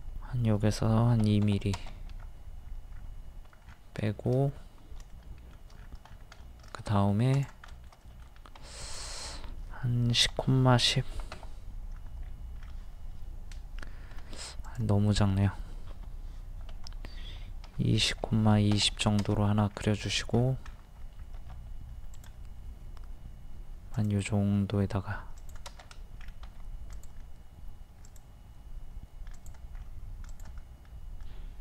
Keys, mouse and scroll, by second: 1.2 KP_2, 2.3 scroll up 1, 3.6 scroll down 1, 4.1 shift+middle click, 4.5-5.0 scroll up 1, 5.1 shift+middle click, 5.7 scroll down 1, 6.4 middle click, 6.9 middle click, 7.4 click, 7.7 middle click, 8.8 click, 10.1 KP_1, 10.3 KP_0, 11.0 KP_1, 11.1 KP_0, 14.2 ctrl+z, 14.7 click, 17.7 KP_2, 19.7-20.1 scroll up 1, 21.4 a, 22.2 click, 25.8 scroll up 1, 26.5 typing, 26.9 click, 29.8-30.3 scroll up 1, 30.3 click.